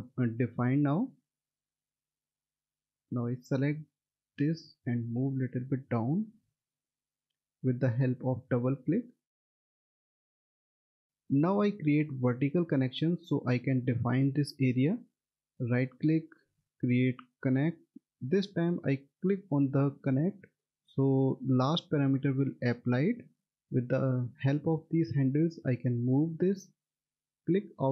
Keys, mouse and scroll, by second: 3.2 click, 3.4 double click, 4.6 click, 6.7 double click, 7.8 click, 10.1 middle click, 11.0 click, 15.3 right click, 20.0 click, 23.7 click.